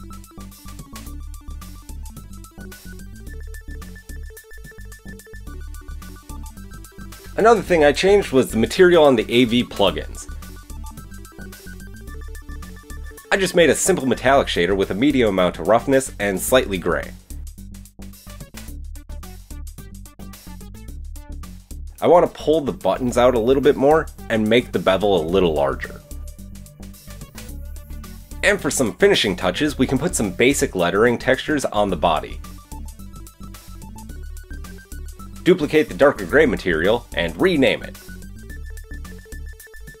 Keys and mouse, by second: 4.4-9.4 shift+middle drag, 10.1 click, 11.0 click, 11.5 click, 12.7-15.8 drag, 15.8-17.7 middle drag, 17.7 click, 17.9-21.6 middle drag, 22.0 click, 22.2 KP_3, 22.9 g, 23.6 middle click, 24.8 click, 26.3-27.4 shift+drag, 27.4 middle click, 27.8 drag, 27.9-29.2 middle drag, 29.2-34.2 drag, 31.1 KP_1, 34.2-36.0 middle drag, 36.0-40.0 drag, 38.1 t.